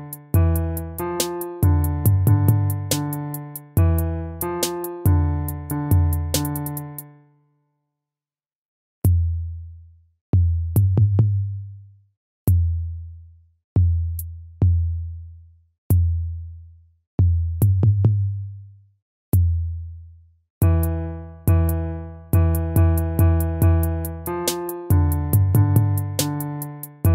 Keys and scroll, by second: 16.7 ctrl+z, 24.5 ctrl++.